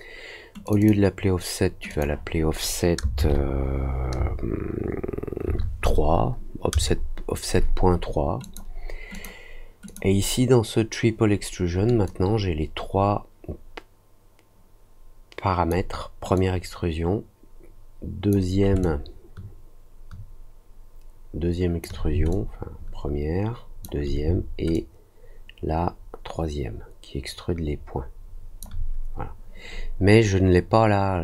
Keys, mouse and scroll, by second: 0.6 click, 0.7 click, 1.8 click, 8.4 click, 9.1 click, 9.8 click, 12.0-15.6 drag, 16.3-18.2 drag, 18.8-21.8 alt+drag, 22.2-23.8 alt+drag, 24.7-28.5 alt+drag.